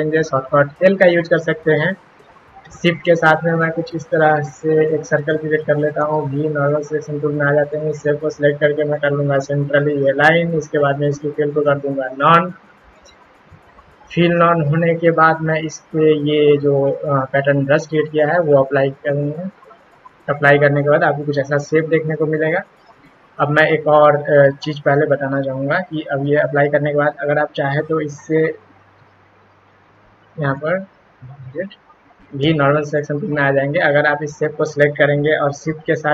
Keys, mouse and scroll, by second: 1.0 l, 2.9-4.8 shift+drag, 6.0 v, 6.8 click, 8.3 click, 8.8 click, 11.0 click, 12.0 click, 12.7 click, 14.1 click, 17.7 click, 27.8-30.5 drag, 31.0 ctrl+z, 32.4 v, 32.8 click, 33.6 click, 36.0-36.1 shift+drag.